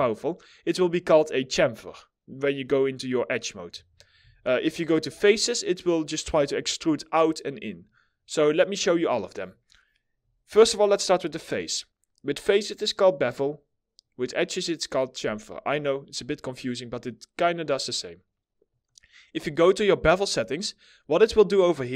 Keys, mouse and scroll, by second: 3.8 4.